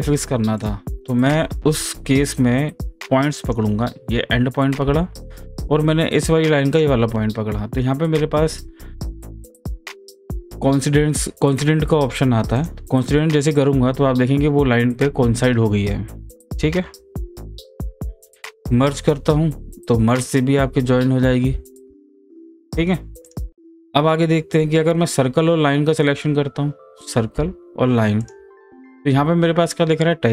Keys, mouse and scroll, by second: 0.6 click, 3.4 click, 6.7 ctrl+click, 12.6 click, 16.5 click, 17.0 ctrl+z, 23.2 ctrl+z, 23.2 click, 24.5-24.8 scroll down 1, 24.8-25.9 scroll up 1, 27.0 click, 28.2 ctrl+click.